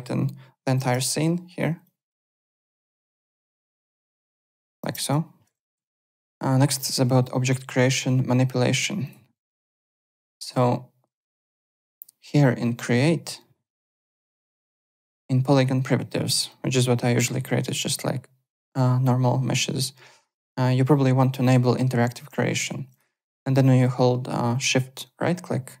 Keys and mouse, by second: 0.7 End, 0.8 Return, 1.8 click, 2.5 KP_1, 2.7 Return, 3.4 click, 3.5 KP_2, 3.6 Return, 4.3 click, 4.8 KP_0, 4.9 KP_Enter, 4.9 Return, 5.7 alt+Tab, 9.0 click, 9.3 alt+right click, 10.0 click, 11.6 click, 22.9 click, 25.0 shift+right click.